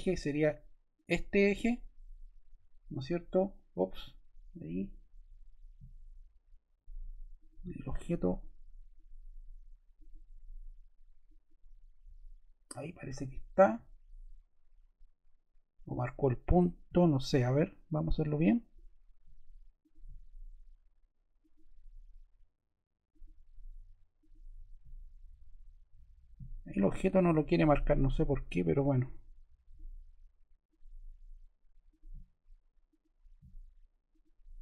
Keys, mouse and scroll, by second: 7.3 click, 8.3 click, 31.8 click, 32.8 click.